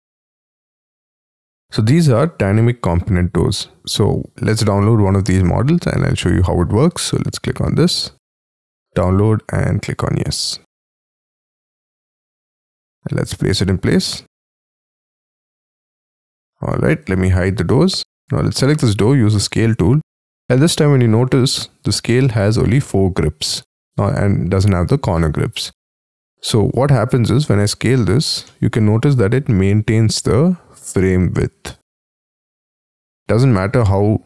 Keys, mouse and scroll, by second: 1.8-5.4 scroll down 7, 5.4-6.0 scroll down 2, 6.0 scroll up 2, 12.9 middle click, 13.3-13.7 scroll up 5, 15.0 scroll down 7, 15.6 middle click, 16.8 space, 17.4 F2, 17.7 middle click, 28.4 middle click, 33.1 middle click.